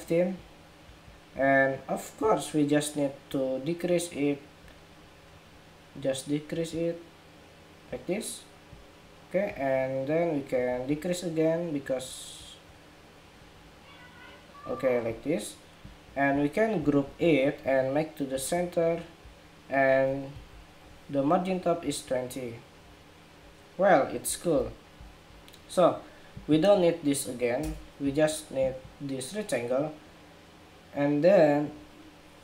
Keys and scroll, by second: 16.8 super+g, 20.1 alt+shift+Up.